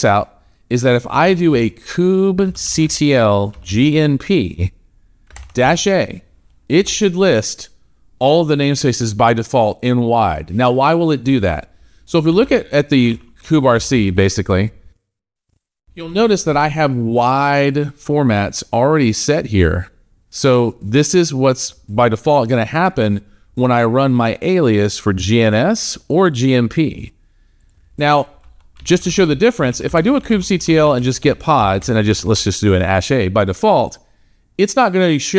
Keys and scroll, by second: 5.5 shift+a, 31.9 shift+a.